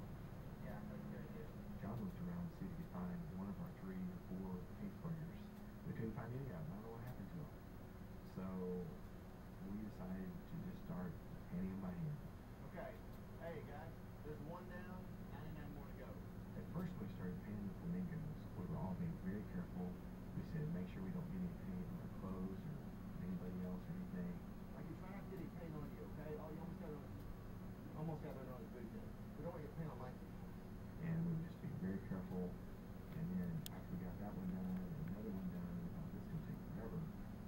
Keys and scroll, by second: 10.9 ], 13.7 ].